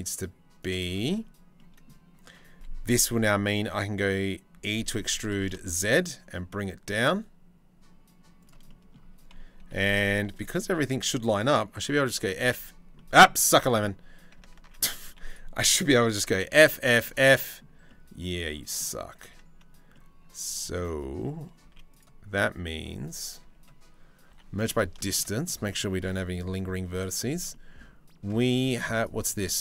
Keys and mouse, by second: 1.2 click, 4.2 e, 9.2 2, 11.9 f, 12.2 f, 13.1 ctrl+z, 14.2 ctrl+z, 14.7 2, 16.0 f, 16.3 f, 16.7 f, 18.8 ctrl+z, 21.3 z, 22.0 middle click, 23.0 a, 23.9 m, 24.6-25.9 shift+middle drag, 27.1 click, 27.9 click, 28.3 z, 29.3 1.